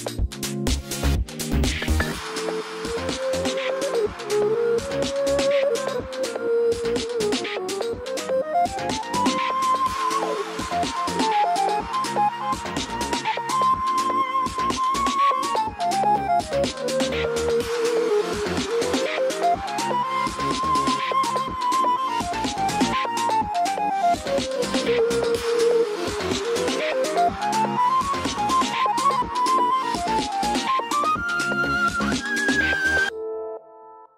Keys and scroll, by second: 29.8 ctrl+z.